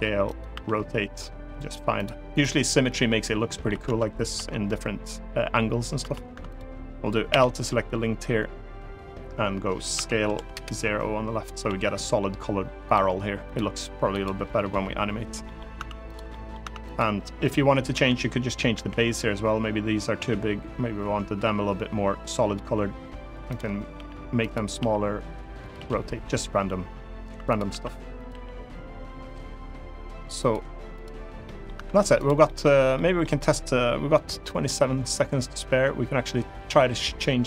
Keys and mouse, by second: 0.0 click, 0.3 r, 1.7 click, 2.5 middle click, 3.6 Tab, 4.1 Tab, 5.7 Tab, 6.0 Tab, 7.0 l, 9.6 s, 10.1 0, 10.2 Return, 11.4 g, 12.6 click, 13.2 click, 13.9 click, 15.2 middle click, 15.5 Tab, 15.8 click, 16.0 middle click, 16.3 Tab, 16.5 click, 17.6 l, 18.4 l, 19.9 s, 23.2 click, 23.7 g, 24.1 click, 24.5 r, 25.3 click, 25.5 g, 27.2 click, 27.4 s, 27.9 click, 28.0 g, 30.1 click, 30.6 click, 31.1 middle click, 31.5 Tab, 31.9 click, 32.2 middle click, 32.7 middle drag, 34.1 middle drag.